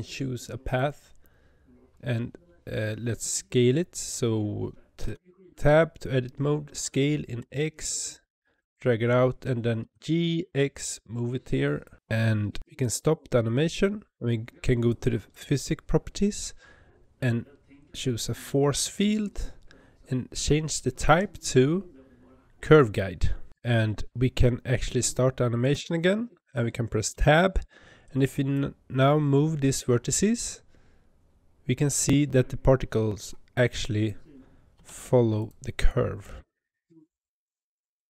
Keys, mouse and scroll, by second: 5.0 Tab, 6.8 s, 9.8 g, 11.9 Tab, 12.6 space, 18.8-25.6 drag, 25.6 space, 27.0 Tab, 27.9 click, 29.5 g, 33.6 click, 34.6 g, 35.8 click, 36.1 g.